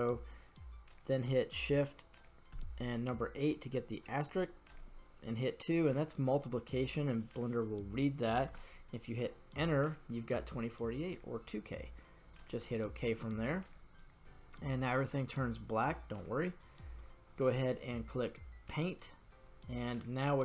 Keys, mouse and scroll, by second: 13.9-16.0 middle drag, 18.1 click.